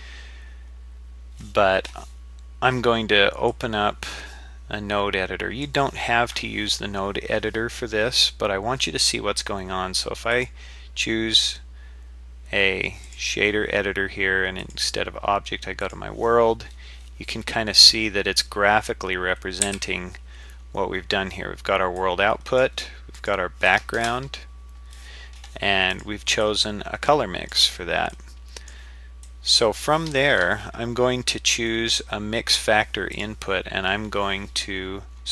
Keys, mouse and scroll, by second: 3.5-6.2 drag, 10.3-13.2 drag, 14.6-16.7 drag, 16.7-17.3 scroll down 2, 17.3-17.9 scroll down 1, 17.9 scroll down 1, 18.0-18.5 scroll down 1, 19.6 n, 20.4-21.2 scroll up 2, 21.2-21.6 scroll down 2, 22.0 click, 23.2 click, 25.9 click, 26.4-27.6 drag, 28.1 click, 29.8 click, 33.1-35.3 drag.